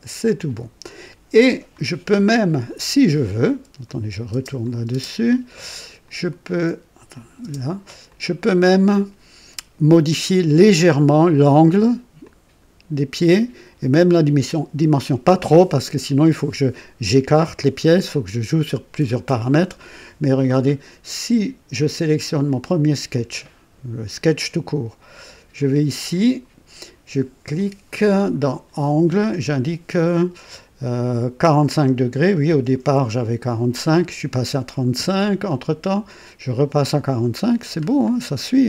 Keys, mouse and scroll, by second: 0.3 click, 3.8 click, 4.3 space, 4.6 click, 6.0 click, 7.1 click, 7.4 space, 8.0 click, 8.6-9.6 drag, 10.3-11.2 drag, 11.5 click, 12.2 click, 16.0-16.7 drag, 18.1 click, 20.6 scroll up 2, 22.3 click, 25.5 click, 26.1 click, 27.5 click, 31.9 KP_4, 32.4 KP_5, 34.9 Return, 34.9 Return, 37.8-38.1 scroll down 1, 38.2-38.6 drag.